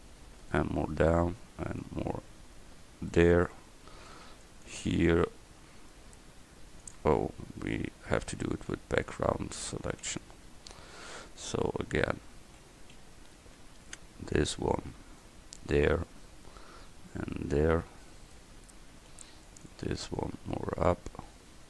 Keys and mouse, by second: 4.0 a, 4.2 c, 8.4 ctrl+z, 8.8 ctrl+z, 9.2 ctrl+z, 9.7 ctrl+z, 10.1 ctrl+z, 12.7 a, 13.5 c, 18.9 a, 19.2 c.